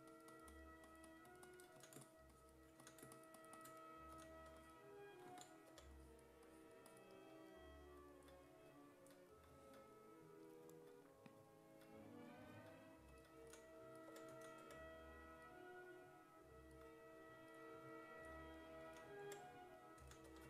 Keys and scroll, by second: 0.0-0.2 typing, 1.8 s, 2.8 s, 4.1 s, 5.7 4, 13.4-15.1 typing, 18.9 s, 19.3 5, 20.0 s, 20.3 3.